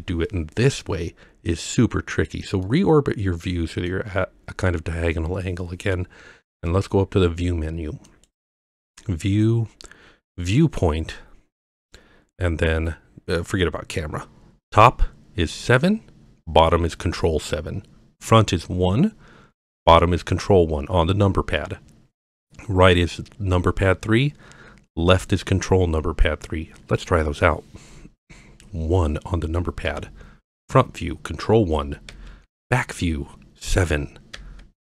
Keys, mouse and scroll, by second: 2.6-3.9 middle drag, 8.1-26.4 drag, 29.9 KP_1, 32.1 KP_1, 34.3 KP_7.